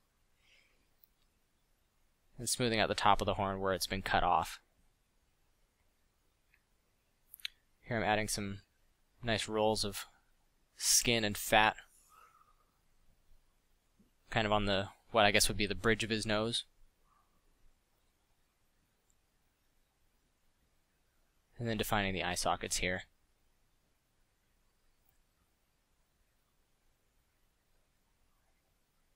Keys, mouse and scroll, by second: 0.7 middle drag, 3.1 f, 15.3-15.7 middle drag, 16.0 middle drag, 17.5 f, 18.2 f, 19.9 f.